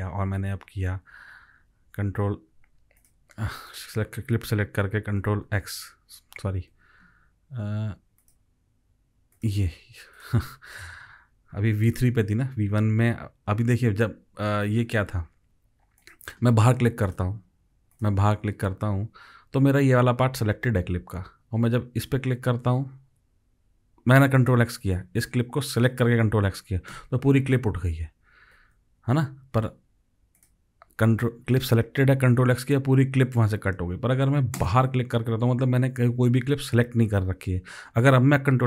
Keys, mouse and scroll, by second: 1.6 click, 2.2 ctrl+x, 4.5 click, 5.2 ctrl+x, 6.2 ctrl+click, 6.7 ctrl+z, 27.0 ctrl+x, 28.6 ctrl+z.